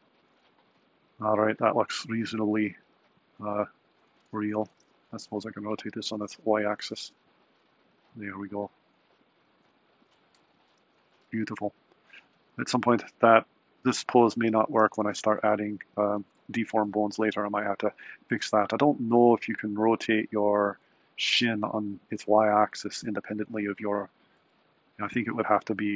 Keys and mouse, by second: 3.7 click, 4.4 r, 14.3 a, 14.8 i.